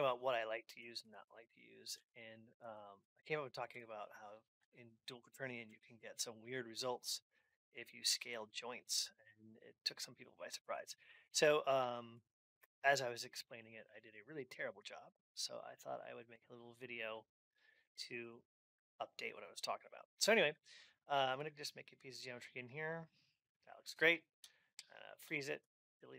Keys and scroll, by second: 10.3 Return.